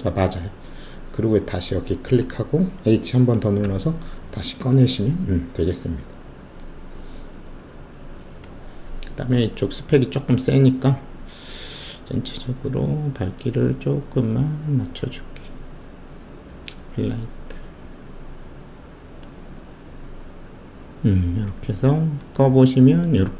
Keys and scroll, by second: 3.6 h.